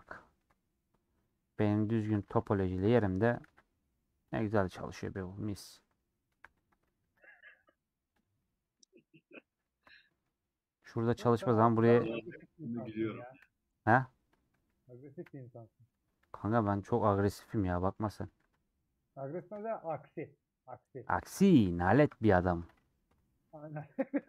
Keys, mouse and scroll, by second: 0.1 scroll down 1, 0.4 3, 1.9 alt+click, 2.8 ;, 3.4 ctrl+b, 4.7 middle click, 5.5 Tab, 5.7 middle click, 6.2 2, 7.0 ctrl+b, 8.3 middle click, 8.8 Tab, 9.1 middle click, 9.4 Tab, 10.0 middle click, 10.2 scroll up 1, 11.6-13.4 middle drag, 13.4 /, 15.2 /, 15.4 middle click, 15.9 Tab, 17.4 middle click, 18.3 ctrl+b, 19.7 middle click, 19.9 3, 20.1 click, 20.3 middle click, 21.2-22.4 ctrl+drag, 22.4 middle click, 23.1 ;, 23.2 middle click, 23.8 ctrl+b.